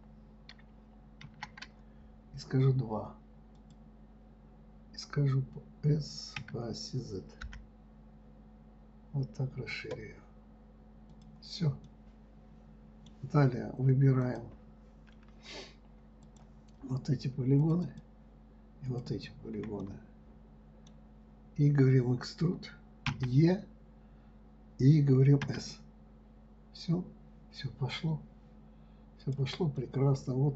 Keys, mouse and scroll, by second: 0.0 ctrl+e, 12.2-14.6 middle drag, 14.6 click, 16.6 click, 18.0 shift+click, 18.2 shift+click, 19.3 shift+click, 19.5 shift+click, 20.2-23.2 middle drag, 30.1-30.5 middle drag.